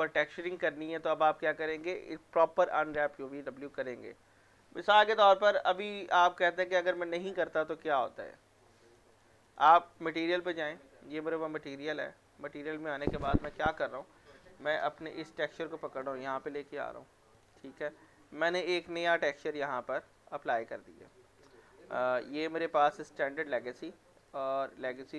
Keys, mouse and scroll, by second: 0.0 scroll down 1, 0.3 alt+middle click, 0.7 w, 1.0 middle click, 2.1-3.0 scroll down 1, 5.3 click, 7.6 right click, 8.9 click, 10.2 m, 15.1-16.9 drag, 16.9-17.4 scroll up 1, 17.4 click, 22.9 click, 23.9-24.3 scroll up 1, 24.3 click.